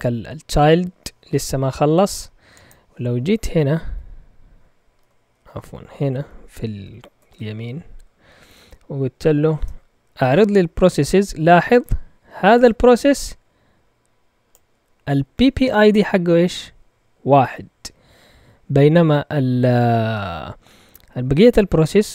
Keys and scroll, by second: 3.9 q, 5.3 ctrl+Caps_Lock, 5.6 shift+q, 7.2 ctrl+Tab, 7.5 q, 8.4 Up, 8.8 Up, 9.5 Return.